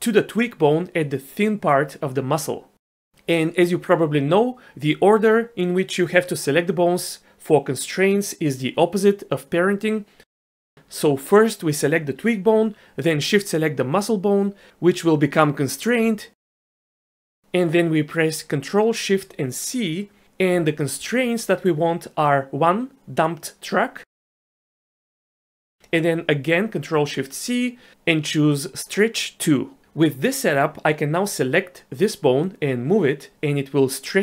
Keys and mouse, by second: 0.0 shift+middle drag, 20.8 ctrl+shift+c, 26.4 ctrl+shift+c, 33.4 click.